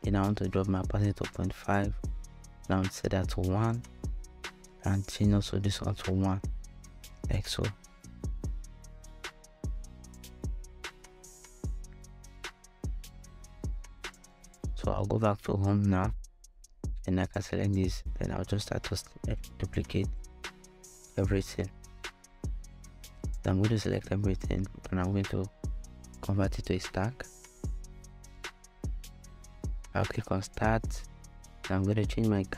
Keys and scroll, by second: 2.1 |, 2.3 Return, 5.8 |, 6.1 Return, 19.0 alt+shift+super+d, 19.5 shift+super+d, 25.0 alt+super+Return, 31.5 BackSpace, 32.2 Return.